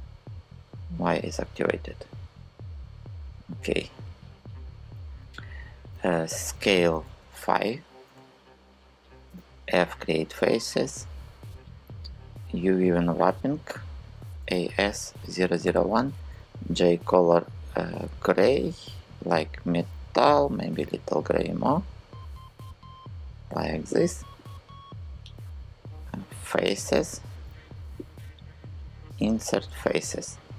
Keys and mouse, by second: 0.4 click, 6.1 s, 6.8 KP_5, 7.7 Return, 8.9 f, 12.7 click, 13.7-15.9 typing, 15.3 Return, 20.1 g, 26.6 n, 28.7 click.